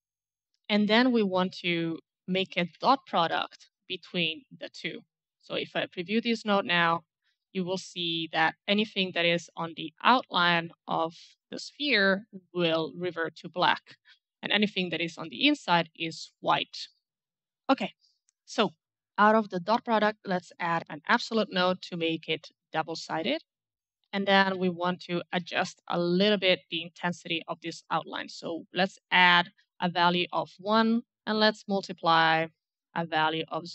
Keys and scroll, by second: 0.0-0.6 typing, 2.3-3.3 typing, 3.4 Return, 20.5-21.2 typing, 22.6 Return, 24.5 a, 25.2 d, 25.4 d, 31.0 m.